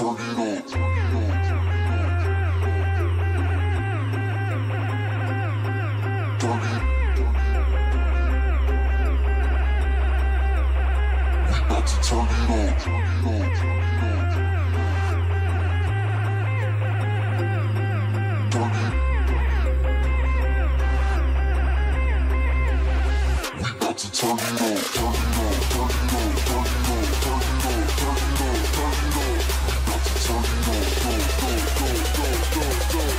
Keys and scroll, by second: 9.1 ctrl+shift+space, 10.7 ctrl+shift+space, 11.4 ctrl+shift+space, 12.7 ctrl+shift+space, 14.3 ctrl+space, 29.7 ctrl+space, 32.7 ctrl+space.